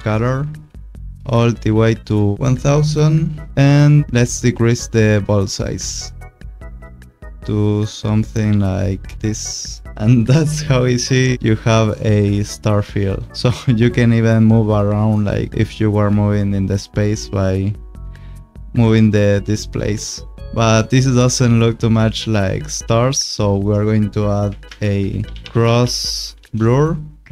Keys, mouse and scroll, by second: 5.2 click, 17.4 click, 22.5 click, 24.6 ctrl+space, 25.2-26.1 typing, 26.4 Return.